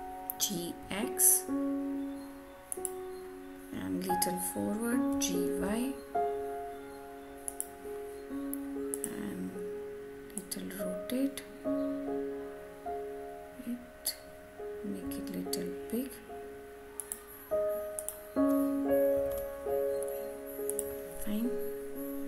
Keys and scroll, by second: 19.1 Return.